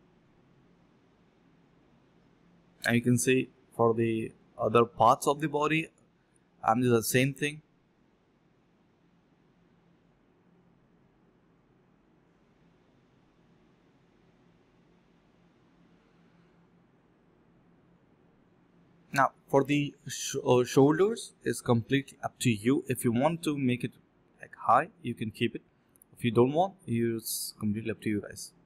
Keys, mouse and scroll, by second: 0.0 alt+click, 0.1 alt+double click, 0.3 alt+double click, 0.8 s, 1.4 ctrl+b, 2.4 alt+click, 3.3-3.6 scroll down 1, 3.6 middle click, 4.0 scroll up 1, 4.4 scroll down 1, 4.6 middle click, 6.4 alt+click, 6.8 typing, 11.4 double click, 11.8 alt+click, 12.0 alt+click, 12.3 alt+click, 13.0 typing, 16.0 typing, 17.0 alt+click, 17.4 alt+click, 17.5 alt+click, 18.4 alt+click, 18.6 alt+click, 19.4-21.0 typing, 22.1 alt+click, 22.8 alt+click, 23.0 ctrl+z, 23.1 ctrl+z, 23.7 ctrl+z, 23.9 ctrl+b, 24.2 double click, 26.4 alt+click, 26.5 alt+click, 27.0 double click.